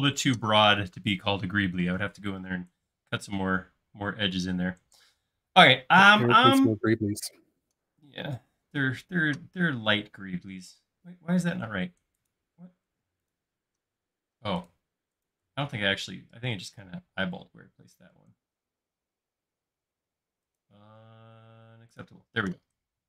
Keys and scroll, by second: 17.4 m, 22.5 space.